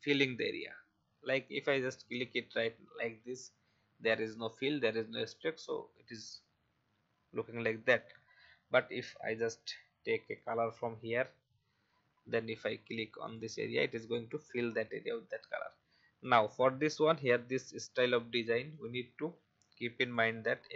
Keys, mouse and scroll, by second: 2.0 click, 8.0 ctrl+z, 10.2 click, 14.4-14.8 alt+scroll up 1, 16.2-18.7 drag.